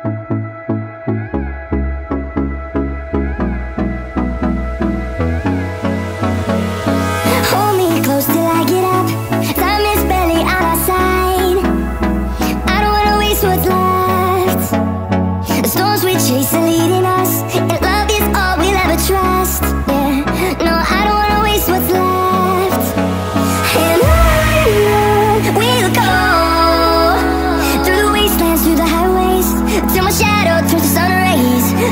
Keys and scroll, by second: 1.5 z, 3.1-4.9 typing, 8.8 space, 10.0 Up, 10.0-11.1 Down, 11.1 shift+Return, 13.2 z, 13.4 space, 13.7 z, 29.7-31.1 typing.